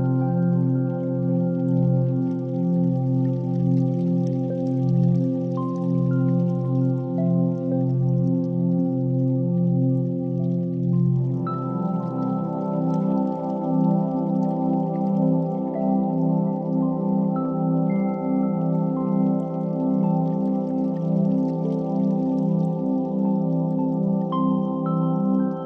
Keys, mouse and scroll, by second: 3.5 shift+a, 11.0 click, 17.3 click, 18.4 click.